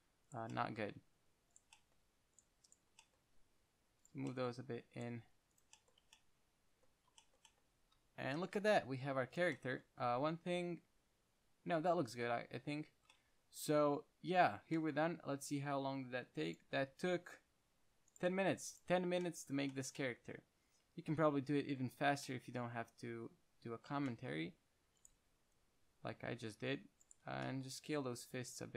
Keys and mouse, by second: 0.8 middle click, 1.5-4.3 drag, 3.6 g, 5.4 g, 6.1-7.8 middle drag, 6.3 Tab, 8.6 KP_1, 8.8 g, 11.2 Tab, 13.2 Tab, 13.4 middle drag, 14.0-15.4 middle drag, 15.5 middle click, 19.5-22.0 middle drag, 22.1-24.2 middle drag, 24.2 Tab, 25.0 z, 25.3-27.1 drag, 25.5 c, 27.3 click, 27.6 z, 28.1 s.